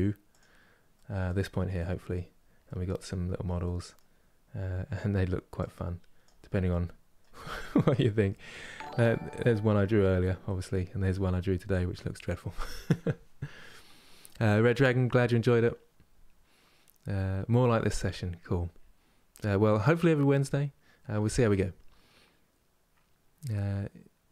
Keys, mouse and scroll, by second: 0.0-1.2 middle drag, 1.2-2.3 scroll down 2, 2.3-5.3 middle drag, 5.3-6.4 drag, 6.4-8.2 middle drag, 8.2 scroll up 2, 9.0-11.0 middle drag, 11.0-12.7 scroll down 1.